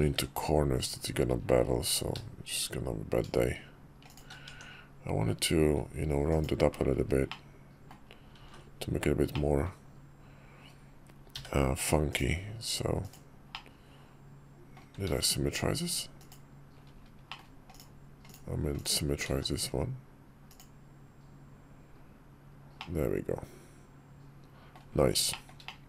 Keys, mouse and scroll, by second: 4.2 Tab, 6.0 click, 7.0-7.7 middle drag, 8.1 alt+x, 9.0-9.4 drag, 12.8 click, 13.3-14.5 drag, 14.8 alt+x, 17.0 middle click, 17.4 click, 18.0 click, 19.0 alt+x, 22.5-24.5 middle drag, 25.0 shift+middle click, 25.4-25.7 middle drag.